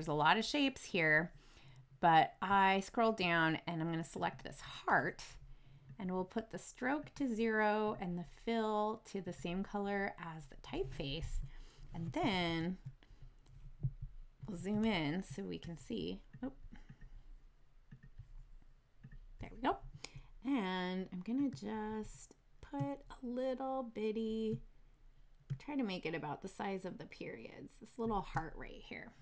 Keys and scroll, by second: 12.3 super+=, 14.0 super+z, 14.8 super+=, 22.7 shift+space.